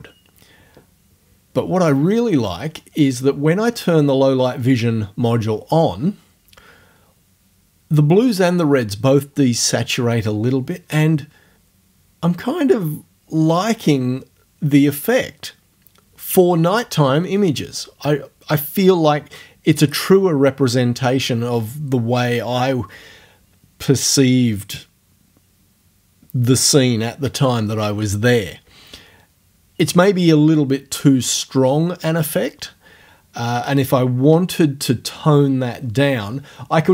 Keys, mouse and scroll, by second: 4.7 click.